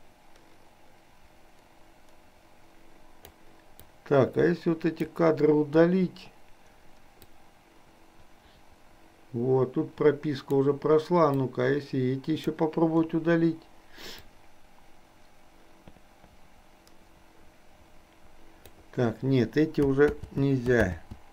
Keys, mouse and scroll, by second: 4.1-5.1 drag, 5.8 Delete, 7.3-10.7 drag, 11.6-12.6 drag, 13.1 Delete, 14.3-18.8 drag, 20.2 ctrl+z, 21.1 ctrl+z.